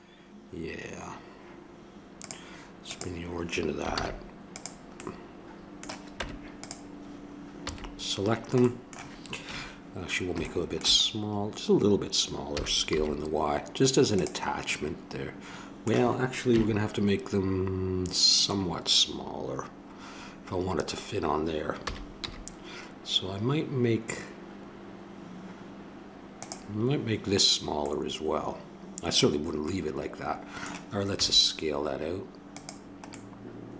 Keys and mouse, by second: 2.1-4.0 drag, 3.9 shift+s, 5.0-6.7 drag, 6.1 Tab, 7.6 a, 9.4 KP_3, 12.5 s, 15.1 middle click, 16.5 KP_3, 21.8 s, 27.9-29.6 middle drag, 30.2 middle click, 30.3 middle click, 31.1 s, 33.1 middle click, 33.4 middle click.